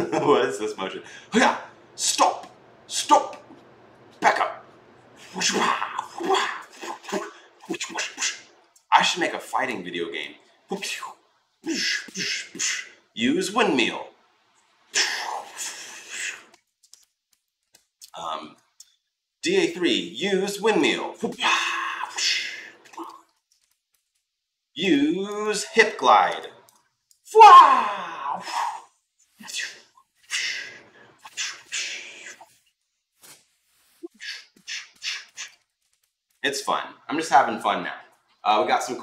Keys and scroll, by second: 16.4 ctrl+z, 23.1 ctrl+z, 35.4 ctrl+z.